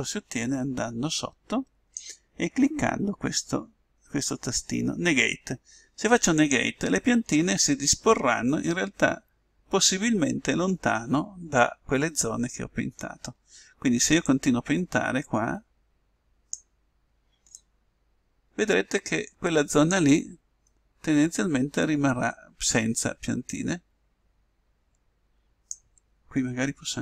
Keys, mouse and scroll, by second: 0.4-2.2 drag, 6.4-8.2 drag, 8.5 middle click, 10.3 middle click, 14.3-16.1 drag, 17.6-19.3 drag, 20.7-22.5 middle drag, 23.5-25.3 drag.